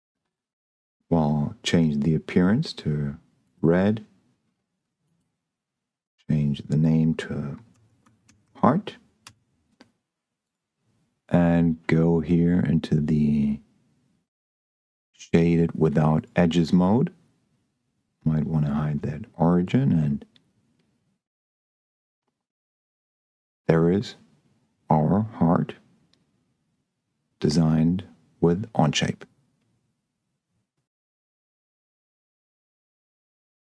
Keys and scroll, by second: 7.4-8.9 typing, 9.1 Return.